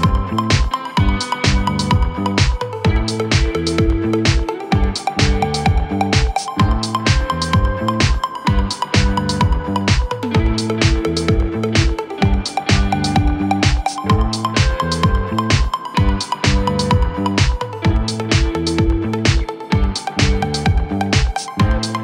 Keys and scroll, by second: 2.0 ], 3.4 4, 5.6 3, 8.0 ], 9.6 4, 12.2 ], 12.9 ], 16.4 ], 18.3 3, 18.7 ].